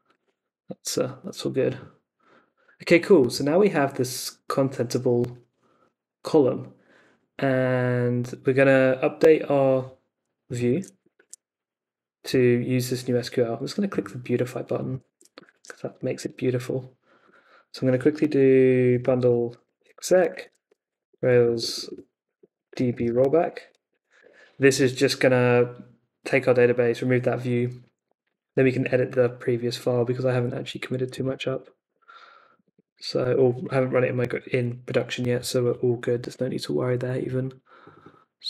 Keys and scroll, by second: 10.7 super+a, 11.1 super+c, 15.1 super+a, 15.5 super+c, 16.2 super+Tab, 18.6-24.4 typing, 28.8 super+Tab, 31.3 super+r, 31.9 super+Tab, 33.3 ⟲, 34.2 ,.